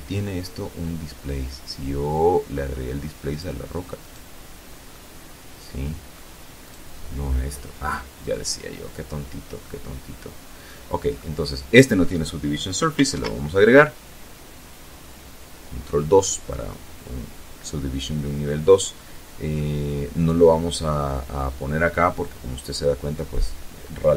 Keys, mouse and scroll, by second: 2.0 right click, 2.8 right click, 3.6-5.0 middle drag, 5.3 right click, 8.3-9.6 middle drag, 9.6-9.9 scroll up 1, 9.9-10.9 middle drag, 11.8 ctrl+2, 18.3 middle click.